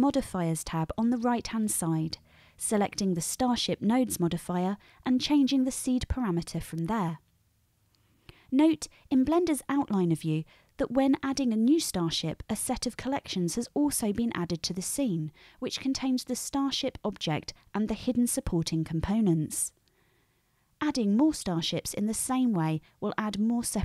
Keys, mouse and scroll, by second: 1.0-5.0 drag, 5.0-23.8 middle drag.